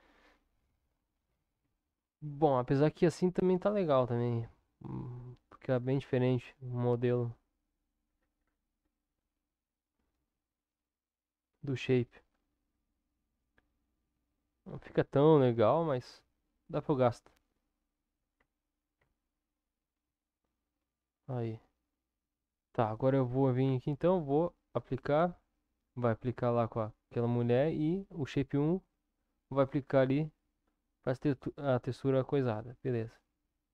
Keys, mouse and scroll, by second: 1.6 Tab, 2.3-5.5 middle drag, 6.5-7.8 middle drag, 9.0-14.3 middle drag, 14.3 click, 16.4 click, 17.0 click, 17.5 click, 18.9 ctrl+KP_7, 21.6 Tab, 24.8 click, 27.7-28.9 drag, 30.0 Tab, 33.0 click.